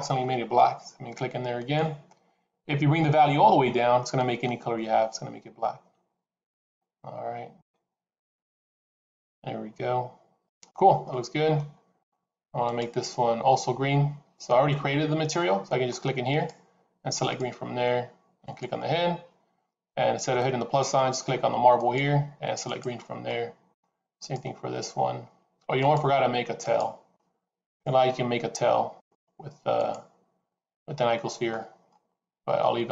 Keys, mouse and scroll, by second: 1.4 click, 10.9 middle click, 12.5 click, 16.2 click, 18.4 click, 21.6 click, 23.2 middle click, 24.1 click, 25.6 click, 31.0 middle click.